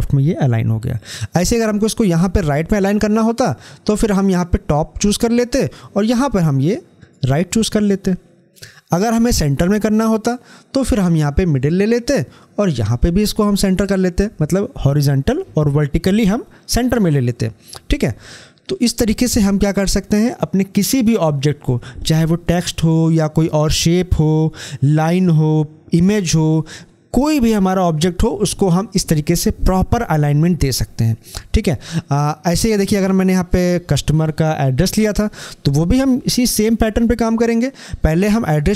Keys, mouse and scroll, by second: 6.8 click, 11.3 click, 33.4 click.